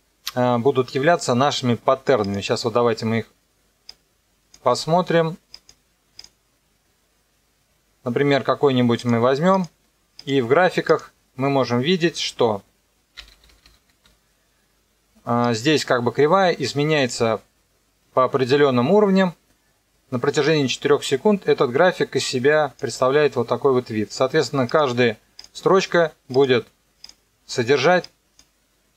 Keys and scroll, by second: 13.2 -.